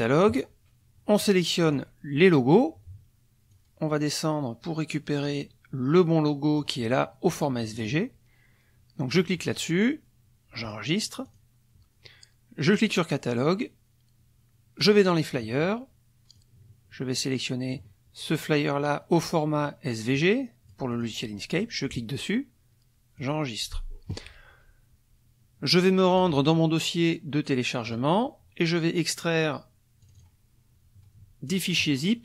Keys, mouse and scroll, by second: 1.7 click, 3.5-6.8 drag, 7.6 click, 9.1 click, 10.7 click, 11.2 click, 12.7 click, 14.8 click, 16.3-17.9 drag, 20.1 click, 20.9 click, 21.6 click, 23.2 click, 26.2 click, 27.8 click, 30.0 click, 31.5 click.